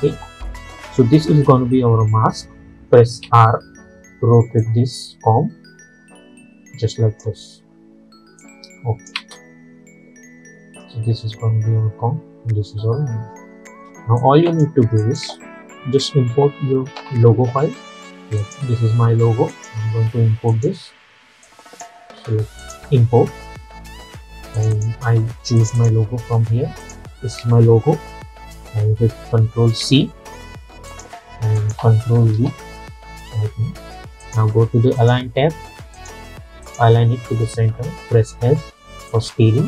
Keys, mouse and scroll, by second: 3.3 r, 4.7-9.2 drag, 9.2 space, 13.8 space, 14.3 click, 17.0 ctrl+i, 18.5 click, 29.9 ctrl+c, 31.0 click, 32.4 ctrl+v, 34.3 click, 38.4 click, 39.2-39.6 drag.